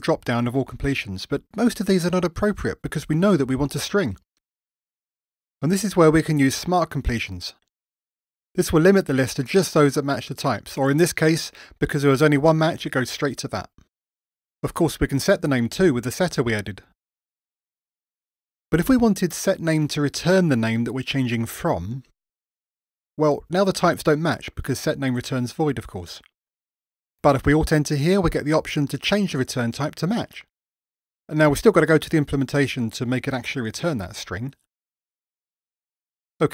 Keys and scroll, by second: 6.5 ctrl+shift+space, 15.0 Tab, 17.2 ctrl+shift+super+Return, 26.7 alt+Return, 31.9 super+z.